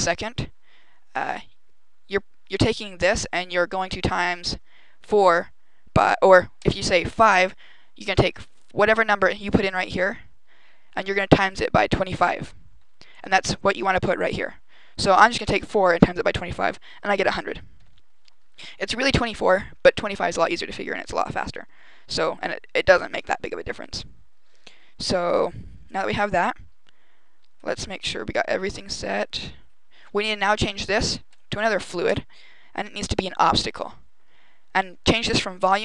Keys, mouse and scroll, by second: 6.4 click, 13.9 click, 27.4 right click, 29.4 right click, 31.2 click, 31.9 click, 35.5 click.